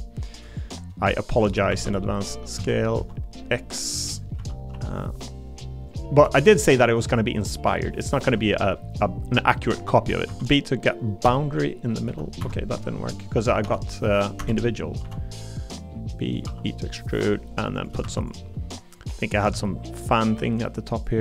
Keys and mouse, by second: 0.5 click, 1.7 shift+d, 2.5 s, 2.9 x, 4.1 click, 4.4 s, 4.7 y, 5.9 click, 6.2 e, 7.1 click, 8.2 i, 9.7 b, 10.3 v, 11.2 b, 12.1 b, 12.4 Escape, 12.8 click, 13.6 i, 14.4 i, 15.0 b, 15.0 v, 16.3 click, 16.4 e, 17.5 middle click, 18.0 shift+d, 19.5 s.